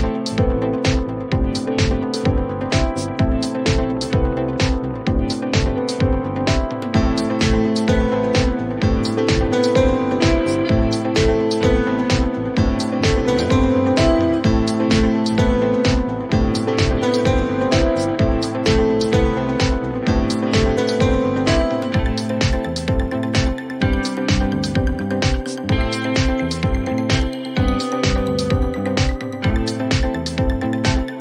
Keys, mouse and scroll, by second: 0.8 click, 3.6 click, 4.8 click, 6.6 click, 7.6 click, 10.5 typing, 10.9 Return, 12.4 click, 12.5 2, 13.1 Return, 14.9 click, 15.0 Return, 17.5 middle click, 18.2 scroll, 19.6 click, 27.1 click, 30.0 click.